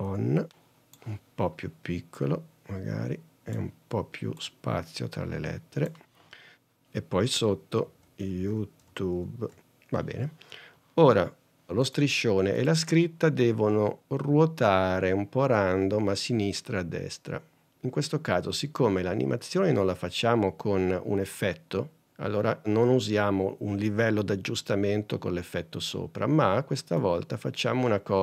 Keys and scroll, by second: 0.0-0.2 typing, 8.1 shift+y.